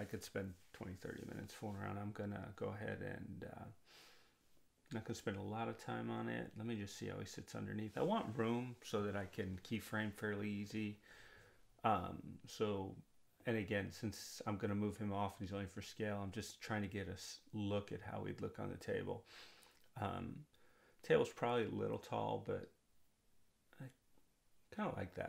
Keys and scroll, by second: 25.1 r.